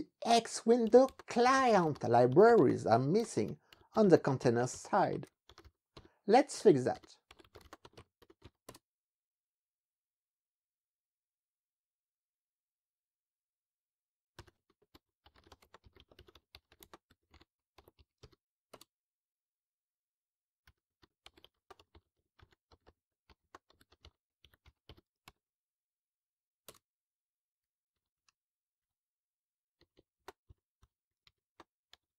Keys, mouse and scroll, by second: 0.1 Up, 0.4-9.0 typing, 14.2-18.8 typing, 18.8 Return, 20.5-25.8 typing, 26.7 Return, 28.0 ctrl+b, 28.2 Down, 28.9 Escape, 30.2-32.1 typing, 32.0 alt+6.